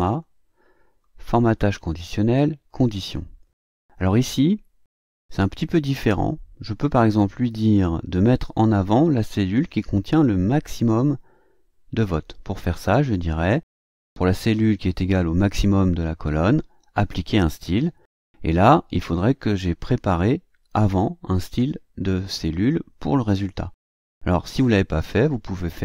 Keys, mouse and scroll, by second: 0.0 click, 2.6 click, 19.9 click.